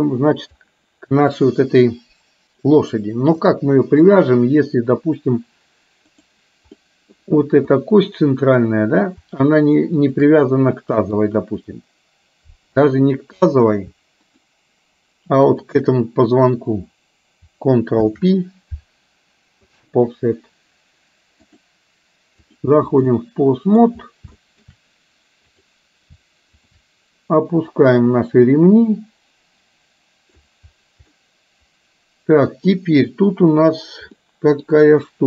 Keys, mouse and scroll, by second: 3.5-6.3 drag, 6.8 middle click, 7.8 middle click, 10.0 shift+click, 10.8 middle click, 15.5 shift+click, 18.7 ctrl+p, 21.5-22.7 drag, 23.2-23.8 middle drag, 24.3-24.7 shift+middle drag, 25.5 click, 26.6 shift+click, 27.7-30.5 drag, 31.2-32.8 middle drag, 34.2 middle click.